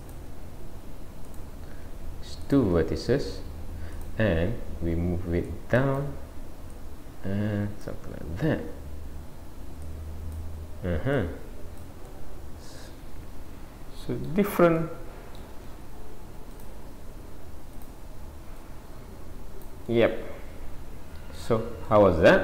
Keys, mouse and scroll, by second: 1.2 click, 2.5 shift+click, 4.0 click, 4.4 scroll down 1, 5.4 scroll down 1, 5.5 click, 6.7 click, 9.8 click, 11.2 click, 12.1 middle click, 14.8 middle click, 16.6 click, 17.7 click, 19.9 middle click, 22.0 middle click.